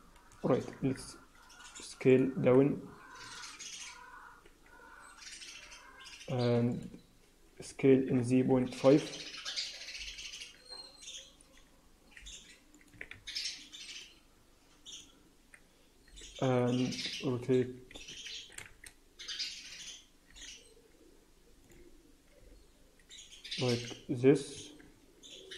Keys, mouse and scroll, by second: 0.7 r, 2.3 s, 6.6 r, 7.5 s, 12.1 r, 12.8 s, 14.3 z, 15.9 r, 18.3 s, 20.2 r, 22.3 g, 24.5 Tab, 24.8-25.4 scroll down 4.